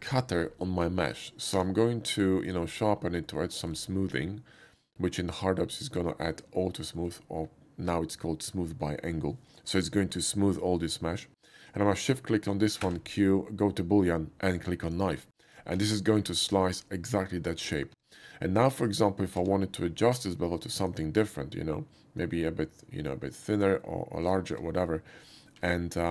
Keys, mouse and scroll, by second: 1.6 q, 2.5 click, 3.3 middle click, 3.7 scroll down 1, 4.0 middle click, 7.0 middle click, 8.8 middle click, 9.5 middle click, 12.4 shift+middle click, 12.8 q, 14.9 click, 15.5 click, 15.8 Tab, 16.3-17.6 middle drag, 18.9 click, 19.4-20.8 middle drag, 19.4 q, 20.8 click, 24.2 click, 24.3 middle click, 24.6 Tab, 25.6 alt+middle click.